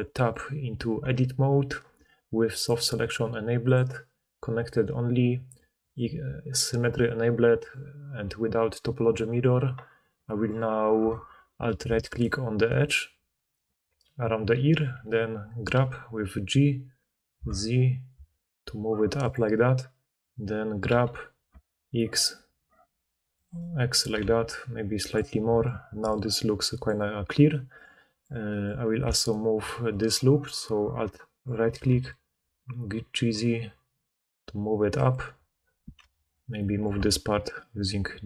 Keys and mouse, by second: 1.0 Tab, 2.8 click, 3.7-5.5 drag, 5.7 click, 7.7-10.2 drag, 10.2-12.2 middle drag, 12.2 alt+click, 12.7 alt+middle click, 12.8 alt+click, 13.4 alt+middle click, 13.6-19.2 alt+drag, 15.7 g, 19.2 click, 19.3-23.3 middle drag, 20.8 g, 23.5 middle click, 23.9 middle click, 24.1 g, 26.0 d, 26.2-35.1 drag, 26.8 d, 26.9 middle click, 26.9 right click, 26.9 d, 27.5 d, 31.7 g, 36.0 1, 36.1 click, 36.8 g.